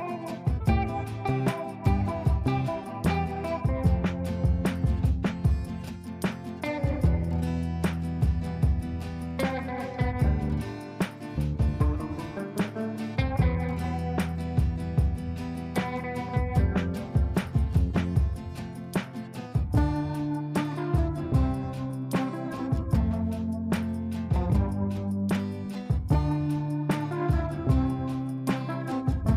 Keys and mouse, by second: 13.0 right click, 16.8 click, 21.3-26.4 drag.